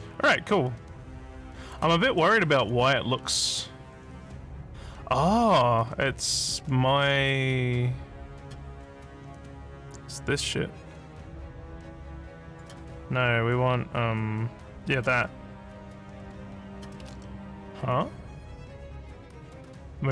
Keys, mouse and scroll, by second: 2.8 scroll up 1, 3.2-6.5 alt+middle drag, 8.4 click, 12.5 click, 14.8 click, 15.8 click, 17.4 alt+middle click, 17.8-20.1 alt+middle drag.